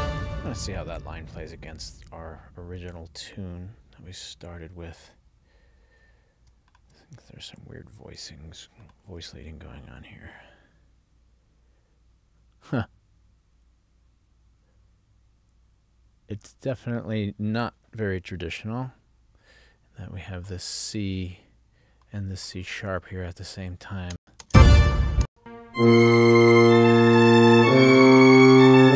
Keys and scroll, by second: 24.3 space, 25.4 space.